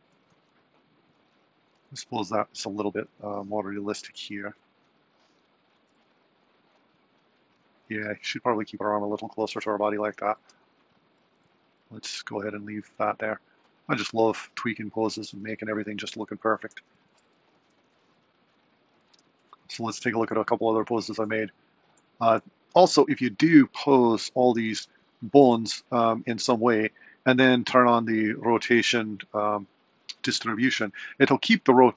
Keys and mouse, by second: 0.4 r, 10.6 r, 16.5 i, 17.3 a, 17.5 i, 19.1 Left, 24.0 click.